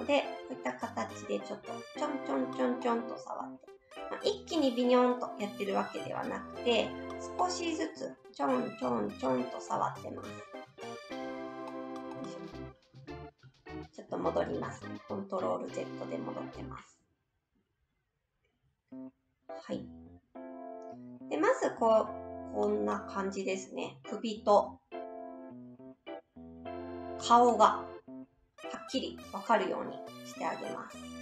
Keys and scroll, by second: 6.0 ctrl+z, 11.9 ctrl+z, 12.1 ctrl+z.